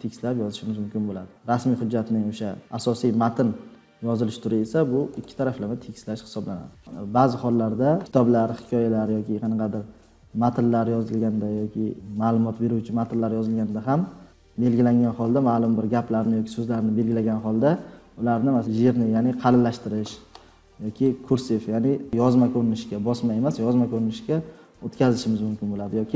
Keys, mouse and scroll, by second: 5.5-5.9 drag, 14.3 click.